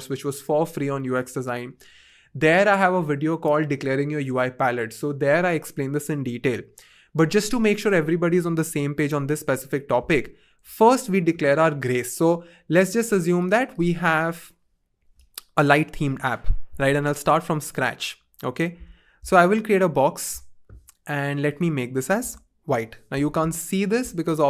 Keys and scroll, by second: 16.0 BackSpace, 18.8 r, 22.2 f, 22.7 Return.